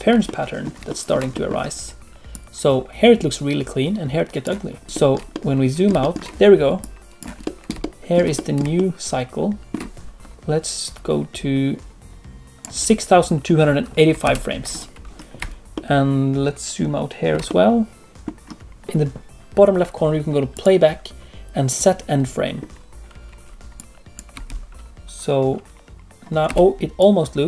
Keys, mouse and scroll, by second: 14.2 ctrl+space, 15.7 ctrl+middle click, 21.9 click, 23.7 click, 24.3 space, 26.4 space, 26.9 click.